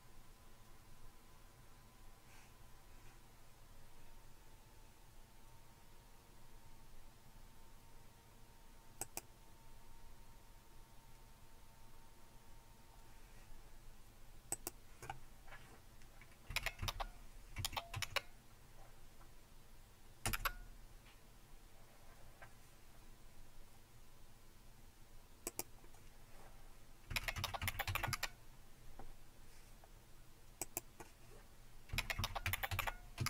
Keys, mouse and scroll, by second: 9.1-16.1 drag, 16.5-18.0 typing, 20.3 Return, 25.7-26.7 drag, 26.9-28.6 typing, 30.6-31.9 drag, 31.7-33.2 typing.